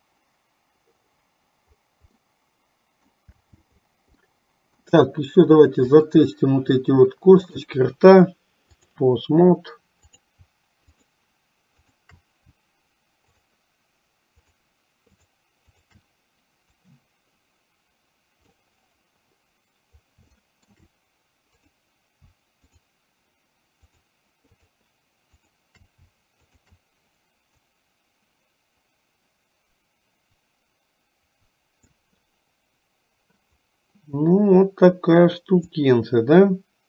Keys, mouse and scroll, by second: 2.3 middle click, 4.3 middle click, 6.0 click, 7.5-9.0 drag, 16.9-18.7 drag, 20.4 shift+middle click, 22.7 shift+click, 23.9 shift+click, 25.4 shift+click, 26.5 shift+click, 27.8-32.0 drag, 35.8 click, 36.0-36.8 drag.